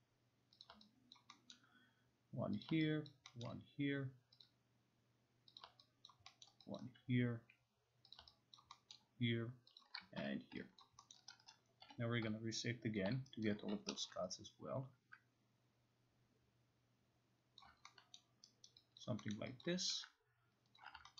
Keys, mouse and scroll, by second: 0.6 click, 1.2 alt+click, 1.5 alt+middle click, 2.6 click, 3.1 alt+click, 3.4 alt+middle click, 4.4 click, 5.6 click, 6.1 alt+click, 6.4 alt+middle click, 8.2 click, 8.6 alt+click, 8.9 alt+middle click, 9.8 click, 10.2 Escape, 10.8 alt+click, 11.1 alt+middle click, 11.5 right click, 11.8 0, 13.0 shift+click, 13.5 alt+right click, 13.7-14.5 typing, 17.6 click, 18.2 alt+middle click, 18.7 alt+right click, 19.0 alt+click, 19.4 alt+middle click, 20.2 alt+click, 20.8 alt+click.